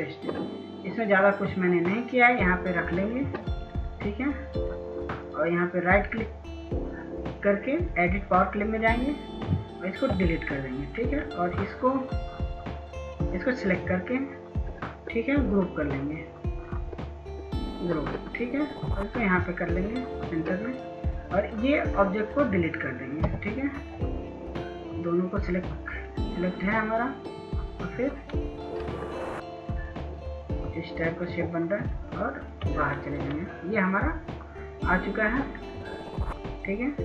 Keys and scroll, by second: 11.6 Delete, 24.9 Delete.